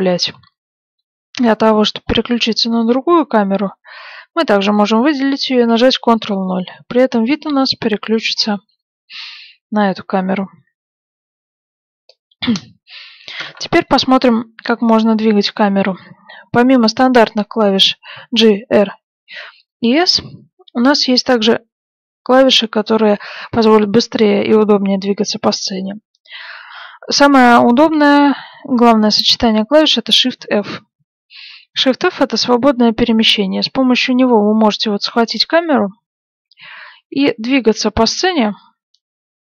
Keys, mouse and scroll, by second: 2.6-4.6 right drag, 5.7 ctrl+KP_0, 6.8-10.0 middle drag, 30.4 shift+f.